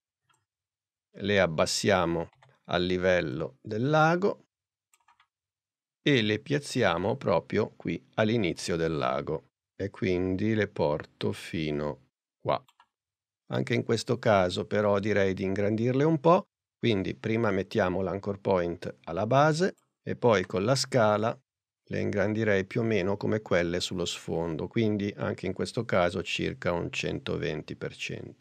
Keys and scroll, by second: 2.4 p, 20.4 s.